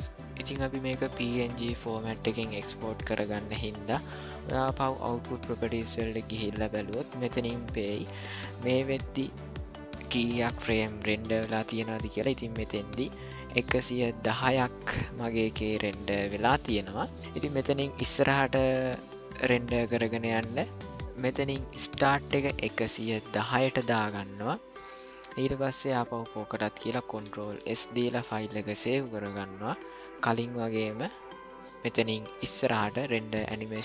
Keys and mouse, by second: 3.5 click, 4.1 click, 6.2 click, 20.8 ctrl+z, 21.9-24.2 drag, 23.0 KP_1, 27.6 ctrl+s, 30.9-33.8 drag.